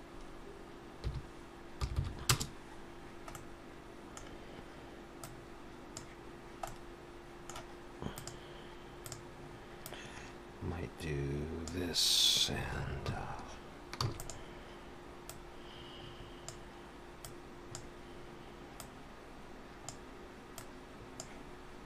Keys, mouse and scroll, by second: 2.0 0, 3.3 middle click, 4.3-5.0 scroll down 2, 5.2 click, 6.7 middle click, 8.2 click, 9.1 click, 14.0 shift+d, 15.3 click, 17.3 click, 18.8 click, 20.6 click.